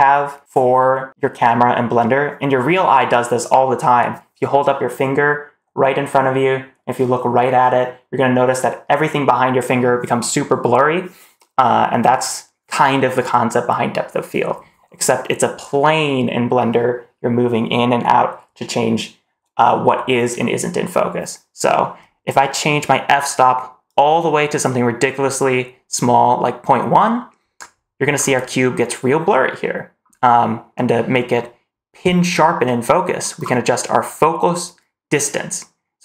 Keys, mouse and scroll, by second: 23.7 click, 28.0-28.9 scroll up 3, 29.9-30.6 scroll up 1, 30.6-34.2 scroll up 3.